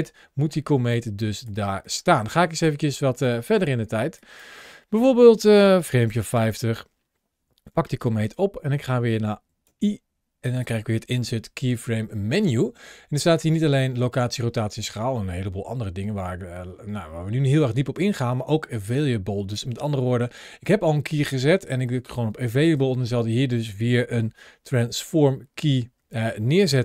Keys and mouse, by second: 0.7 click, 1.6 click, 4.0 click, 5.3 click, 7.5 g, 8.0 click, 15.8 i, 17.0 i, 24.4 ctrl+shift+a.